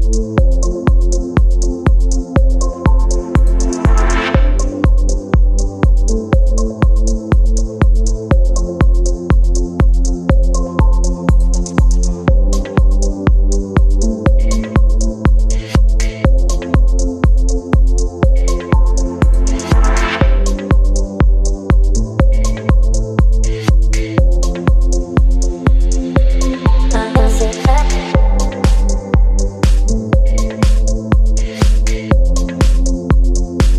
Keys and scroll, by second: 30.4 b.